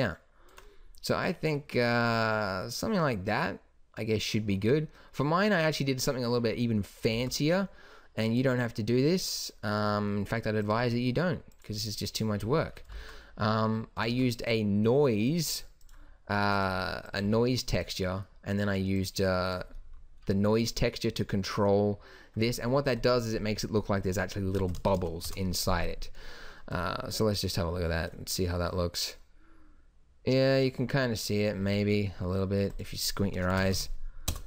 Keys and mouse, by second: 7.1 shift+a, 13.0 shift+a, 14.1 shift+a, 17.3 g, 24.8 KP_0, 33.9 KP_0.